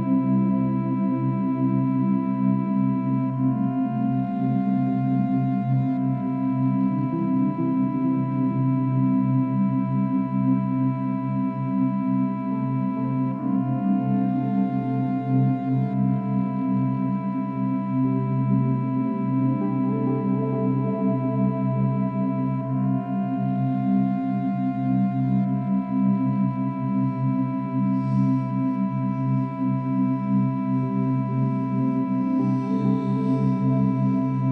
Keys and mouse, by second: 1.7 Delete, 3.7-6.3 drag, 8.2-11.9 drag, 13.1 click, 14.3 ctrl+d, 15.0-15.5 drag, 16.1 shift+Right, 16.6-18.1 shift+Right, 18.1 shift+Left, 18.8 Left, 19.0 Left, 19.2 Left, 19.3 Left, 22.6-27.1 drag, 27.1 ctrl+s, 27.8-31.5 drag, 31.7 click, 32.6 click, 34.4 ctrl+s.